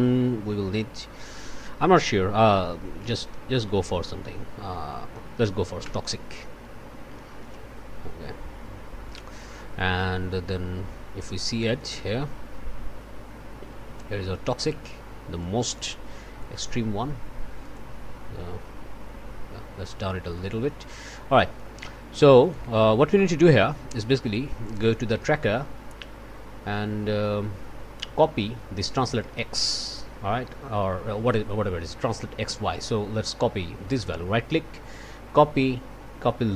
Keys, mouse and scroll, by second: 0.5 Down, 2.8 Down, 3.5 Up, 4.5 Down, 5.8 Return, 9.1 click, 10.3 1, 12.0-14.8 drag, 14.8-15.4 scroll up 1, 15.4 click, 16.0-17.6 scroll up 1, 17.6 click, 18.1 scroll down 1, 20.0 scroll up 1, 20.3 click, 21.3 click, 22.4 click, 22.6 1, 23.1 click, 24.6 click, 33.8 right click.